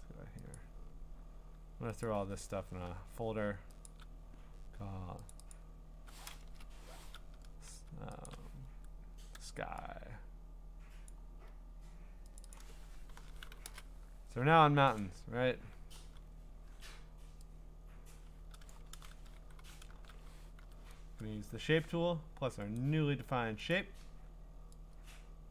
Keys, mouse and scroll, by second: 0.6 click, 1.1 middle click, 1.1 scroll, 2.0 click, 2.3-3.2 scroll, 3.8 shift+click, 5.3 click, 5.5 click, 6.4 Return, 7.1-8.0 scroll, 8.3 shift+click, 8.6-10.3 scroll, 11.1 click, 12.4 click, 12.6 click, 12.9-14.0 typing, 15.0 click, 16.3-17.1 typing, 18.7 click, 18.9 ctrl+z, 19.6 g, 20.6 u, 22.8 click, 23.7 click.